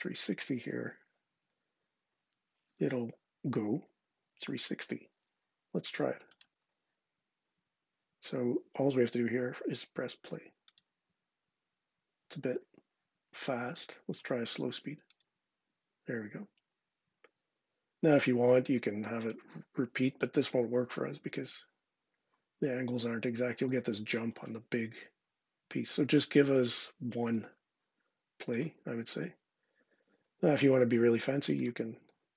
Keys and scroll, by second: 0.0-0.3 typing, 1.1 Tab.